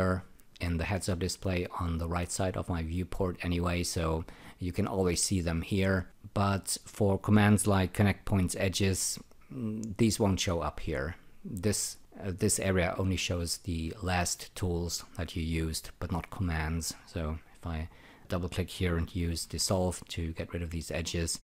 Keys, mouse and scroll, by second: 9.0 e, 17.4 click, 17.6 double click, 19.4 shift+..